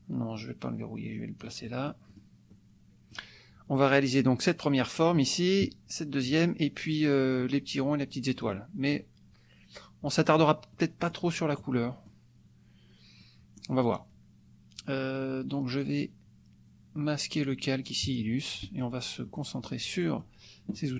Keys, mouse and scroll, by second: 2.5 click, 8.5 click, 10.7 click, 11.6 click, 13.2 click, 18.0 click, 18.5 click, 19.4-20.4 drag, 20.8 click.